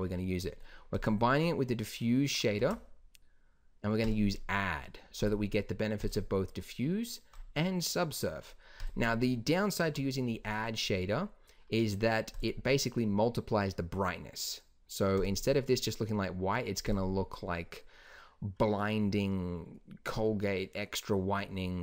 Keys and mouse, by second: 2.5 shift+a, 9.8 g, 18.7-21.8 middle drag.